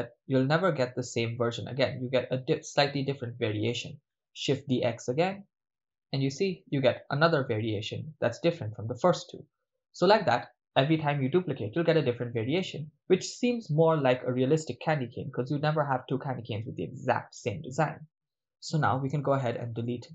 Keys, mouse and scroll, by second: 6.0 shift+d, 6.8 click, 19.0 x.